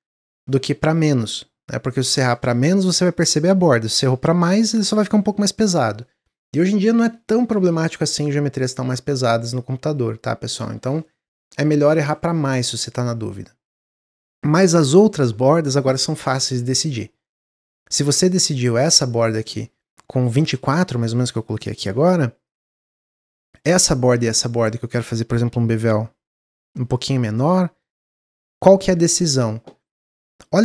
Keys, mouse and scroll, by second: 12.4 click, 12.9 Tab, 13.4 Tab, 17.4-18.5 drag, 18.5-21.6 middle drag, 21.6 w, 22.4 alt+click, 23.1 middle click, 24.0 alt+shift+click, 24.3-25.6 middle drag, 25.6 ctrl+b, 27.2 middle click, 27.8-28.5 scroll up 3, 30.3-30.6 drag.